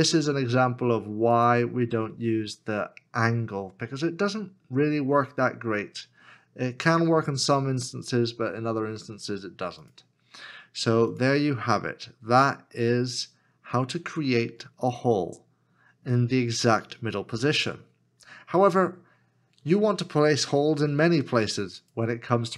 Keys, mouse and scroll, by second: 11.7 middle click.